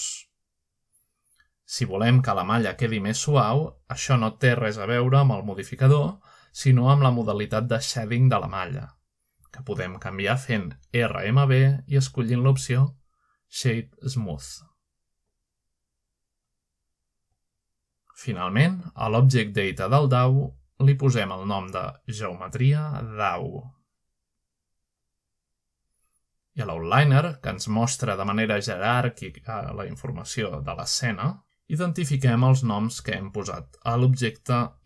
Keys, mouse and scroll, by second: 0.0 click, 1.1-2.0 middle drag, 2.2-2.7 scroll up 1, 2.9 scroll down 1, 4.6-6.3 middle drag, 6.3 middle drag, 6.5-7.0 scroll up 2, 6.6 middle click, 7.3 shift+middle click, 7.4-8.3 shift+middle drag, 7.4-8.3 scroll up 1, 8.3-8.7 scroll down 1, 9.1 shift+middle click, 9.2-9.7 scroll down 1, 10.2-11.9 middle drag, 11.9-12.8 right drag, 14.0 click, 15.9 5, 16.7 scroll down 1, 17.2-18.0 middle drag, 19.5-21.7 middle drag, 22.5 click, 24.3 click, 25.1-27.6 typing, 28.6 click, 28.9 click, 29.4 click, 30.0-31.0 typing, 32.3 click.